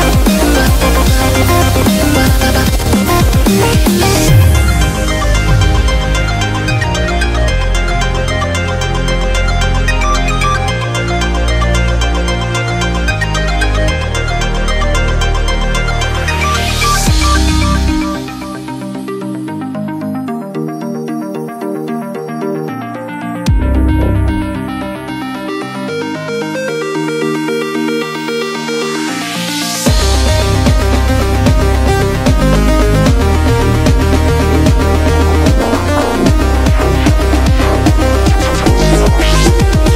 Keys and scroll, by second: 29.4 super+i, 30.5 b, 33.0-34.4 typing, 36.6 typing, 38.0 typing.